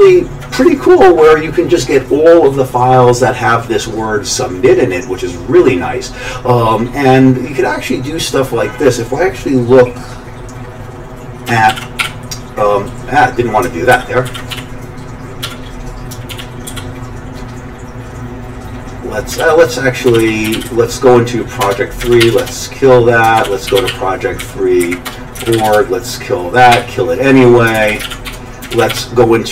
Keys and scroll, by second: 11.7 super+x, 12.0 g, 13.9 ctrl+g, 14.2 ctrl+x, 14.5-16.7 typing, 16.3 ctrl+x, 19.4 ctrl+g, 19.9-21.1 typing, 21.6 Return, 22.0 ctrl+x, 22.2 k, 22.4 Return, 23.4 ctrl+x, 23.4-24.4 typing, 24.8 Up, 25.0 Return, 25.4 ctrl+x, 25.5-29.4 typing, 25.6 Return.